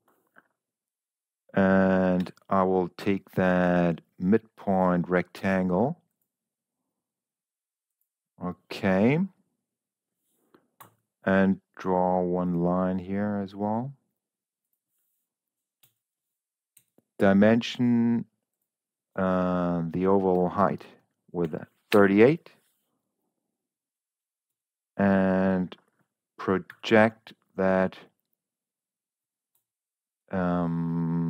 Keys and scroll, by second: 2.6 s, 11.2 l, 16.2 Escape, 16.7 d, 21.0 3, 21.4 8, 21.8 Return, 24.4 Escape, 26.6 v.